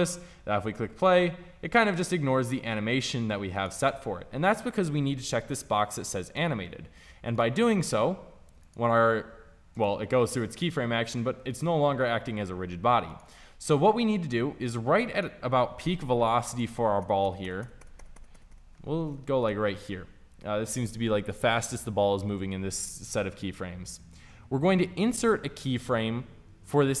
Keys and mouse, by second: 6.2-15.7 drag, 16.5 Right, 18.7 Left, 18.9 Left, 19.3 Right, 19.6 Left, 25.1-27.0 right drag.